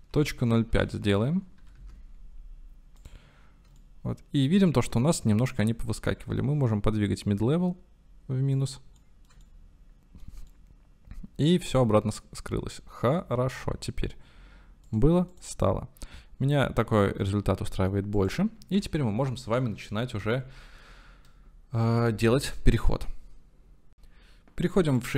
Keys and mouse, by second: 3.8 shift+click, 3.9-4.5 shift+middle drag, 6.1-8.5 drag, 9.0 middle click, 9.5-10.3 shift+middle drag, 10.5-13.7 middle drag, 14.8 middle click, 15.3 middle click, 17.3-18.0 middle drag, 18.4 middle click, 18.7 ctrl+s, 20.5-20.9 shift+middle drag.